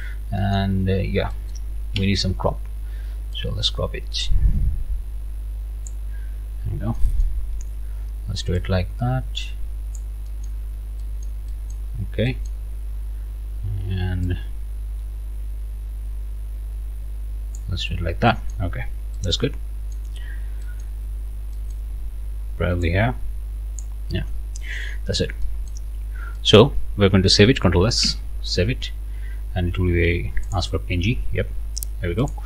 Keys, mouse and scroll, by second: 0.4 click, 0.5 right click, 1.3 right click, 2.0 c, 3.3-6.1 drag, 6.5-6.9 scroll up 1, 7.0 click, 7.4 scroll up 2, 8.6-10.2 drag, 10.3 click, 10.6 scroll down 1, 11.0 middle click, 11.9 scroll down 2, 12.6-13.2 scroll up 2, 17.9 scroll down 2, 18.7 scroll down 2, 19.1-20.1 right drag, 20.3 scroll up 2, 20.6 right click, 21.0-21.5 scroll up 2, 21.5 right click, 22.8-24.0 drag, 24.2 Return, 24.6-25.3 scroll down 2, 25.4 middle click, 25.9 scroll up 2, 26.4 middle click, 28.0 ctrl+s, 30.5 click, 32.2 click.